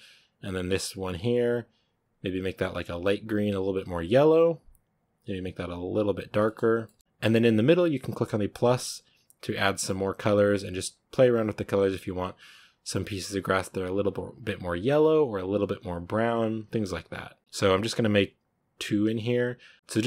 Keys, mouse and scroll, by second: 1.2-1.9 drag, 4.5-5.6 drag, 6.3 middle drag, 6.6 scroll down 2, 6.7 shift+middle drag, 7.0 click, 8.5-10.6 drag, 14.2-16.2 drag, 17.1 click.